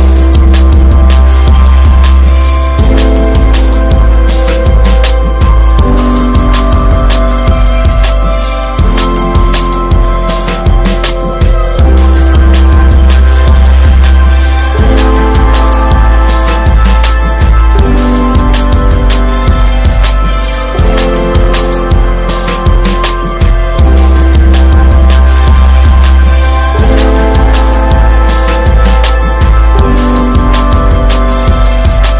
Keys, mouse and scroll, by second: 0.4-1.0 scroll up 1, 1.2 ctrl+r, 1.9 middle click, 2.8 ctrl+b, 4.5 Tab, 4.6 click, 4.8 scroll down 2, 5.1-5.6 middle drag, 5.6 scroll down 5, 5.9-6.6 shift+middle drag, 6.6 scroll up 1, 6.8-7.8 shift+middle drag, 7.8 scroll down 1, 8.1 middle click, 8.6 scroll up 2, 9.0-9.5 middle drag, 9.5-9.8 scroll up 2, 9.8 click, 10.2 Tab, 10.7 p, 14.1 middle click, 14.7 p, 15.5 Tab, 15.6 drag, 16.1 click, 16.3 right click, 17.1 ctrl+3, 17.5 ctrl+4, 17.8 click, 18.0 scroll down 1, 18.3-19.6 middle drag, 19.6 ctrl+3, 19.7 drag, 20.0 alt+middle drag, 20.9 ctrl+s, 22.8 drag, 23.3-23.9 shift+middle drag, 23.9 click, 24.1 Tab, 24.5 alt+middle click, 24.7 alt+middle click, 24.8 alt+z, 25.1 shift+middle click, 25.3 scroll up 1, 25.8 click, 27.4 alt+z, 27.7 click, 27.9-28.5 scroll up 6, 28.2 middle click, 29.0 2, 29.8 3, 30.1-30.4 scroll down 1, 30.4 alt+middle click, 30.7 alt+z.